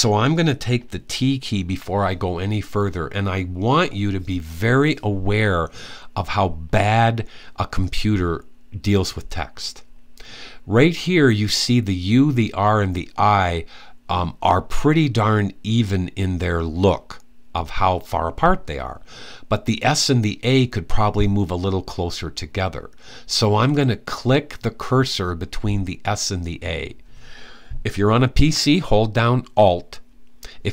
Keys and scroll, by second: 1.4 t.